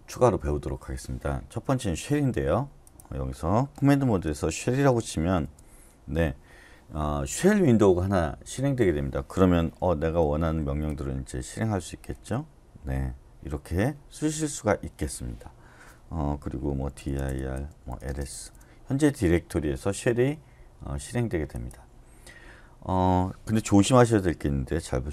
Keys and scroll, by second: 4.0-4.9 typing, 5.4 Return, 9.6-10.4 typing, 10.9 Return, 12.1 Return, 16.9-18.7 typing, 17.3 Return, 20.3-21.0 typing, 23.6 Return.